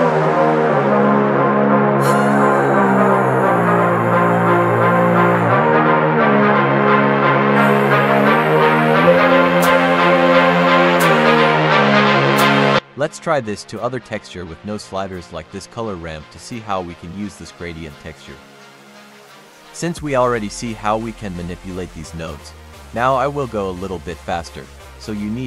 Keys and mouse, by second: 0.5 click, 2.3 click, 3.3 click, 6.6-7.3 drag, 7.7-8.9 drag, 14.2 click, 15.5 click, 16.4 click, 21.3 shift+middle click, 22.8 click, 23.3 click, 25.0 click.